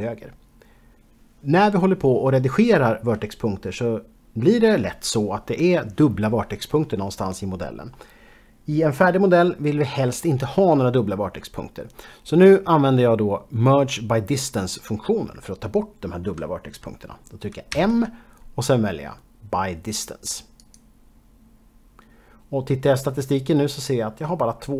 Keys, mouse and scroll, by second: 17.9 m, 20.7 click.